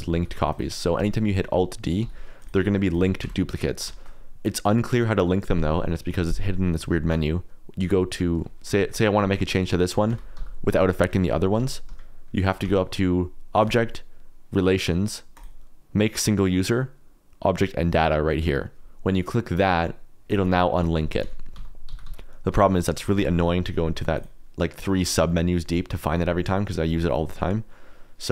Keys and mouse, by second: 0.1 alt+d, 0.5 click, 0.9 Tab, 1.2 click, 2.0 i, 2.5 e, 2.9 click, 3.2 Tab, 3.9 shift+middle click, 8.8 shift+middle click, 9.1 KP_Decimal, 9.6 middle click, 10.0 Tab, 10.3 g, 10.7 middle click, 11.1 Escape, 11.2 click, 11.5 g, 11.8 Escape, 12.4 middle click, 12.6 Tab, 13.6-20.3 right drag, 20.3 click, 21.5 Tab, 21.8 g, 22.0 y, 22.5 x, 23.0 click, 23.1 Tab, 24.1-25.3 drag.